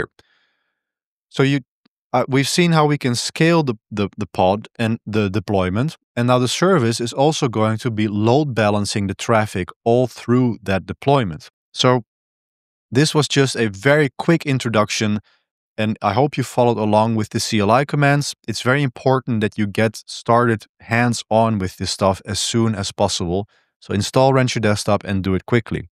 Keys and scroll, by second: 1.0-4.4 typing.